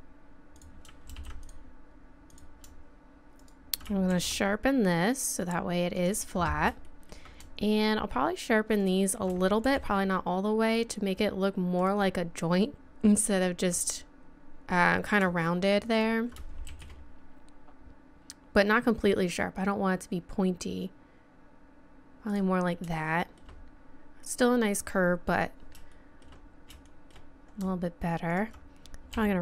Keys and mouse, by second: 1.1 ctrl+r, 4.1 shift+e, 6.8-8.8 drag, 8.8 right click, 9.6-11.8 drag, 9.6 shift+e, 12.9-15.2 drag, 15.9-17.9 drag, 16.7 shift+e, 18.2-19.9 drag, 23.0-29.1 middle drag, 29.1-29.4 right drag, 29.1 r.